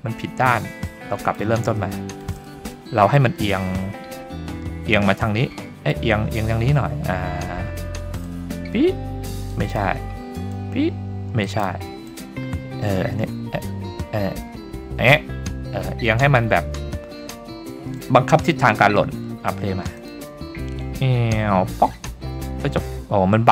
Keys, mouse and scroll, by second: 1.3 click, 1.8-2.2 shift+middle drag, 2.5 middle click, 3.2 middle click, 4.2-4.6 scroll up 2, 5.6 middle click, 8.3-9.5 drag, 10.5 click, 12.1-15.1 drag, 15.8-16.8 scroll down 1, 16.8-17.4 scroll down 1, 17.4-17.9 scroll down 1, 17.8-18.2 scroll up 3, 18.2 shift+middle drag, 18.8-20.0 scroll up 1, 20.0 click.